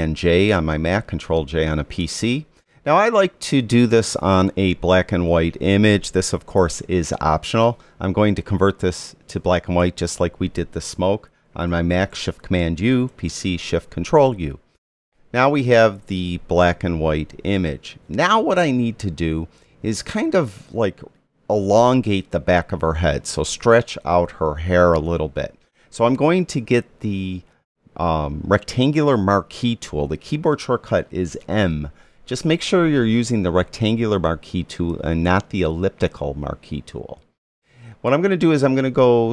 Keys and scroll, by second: 0.2 super+j, 13.1 shift+super+u, 31.5 m.